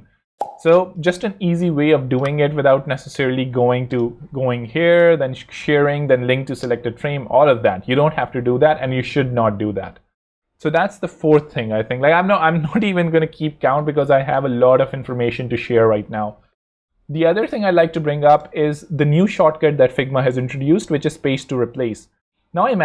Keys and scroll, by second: 3.4 Escape, 6.7 Escape, 15.2 super+x.